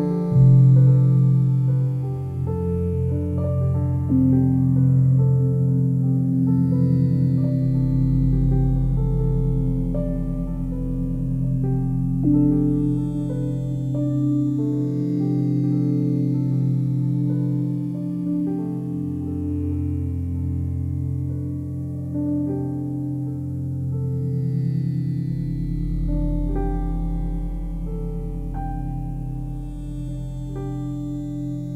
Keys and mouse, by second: 0.0 click, 0.5 alt+click, 1.2 click, 2.2 1, 3.5 e, 4.9 click, 5.8 typing, 6.2 click, 6.8 click, 7.9 typing, 9.1 click, 9.5 click, 9.9 typing, 13.1 click, 16.8 ctrl+z, 17.0 ctrl+z, 17.4 ctrl+z, 17.7 ctrl+z, 18.0 ctrl+z, 18.7 ctrl+z, 19.0 ctrl+z, 19.4 ctrl+z, 20.1 ctrl+z, 21.6 click, 23.1 g, 28.5 click, 30.1 alt+shift+click.